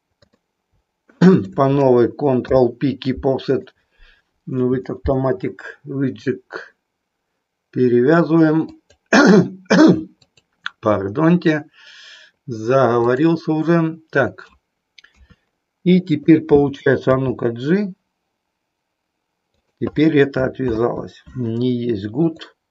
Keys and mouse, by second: 1.3 shift+click, 8.6 click, 10.3-13.3 drag, 15.2 KP_3, 16.1-17.1 drag, 17.2 g, 20.7 ctrl+z, 22.1-22.7 drag.